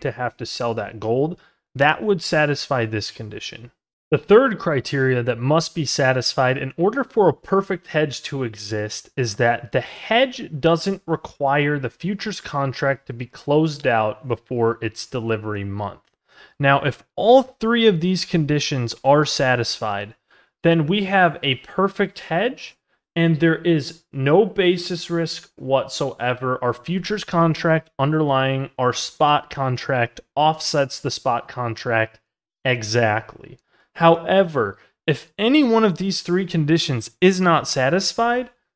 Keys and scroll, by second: 19.5 ctrl+z, 23.0 ctrl+z, 33.5 ctrl+z.